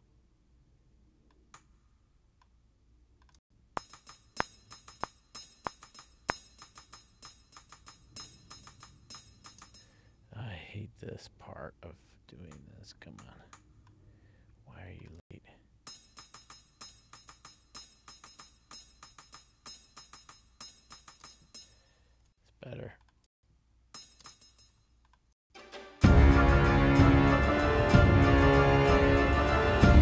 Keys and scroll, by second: 3.5 space, 9.6 space, 15.3 space, 21.4 space, 22.3 ctrl+alt+l, 23.4 space, 25.5 space.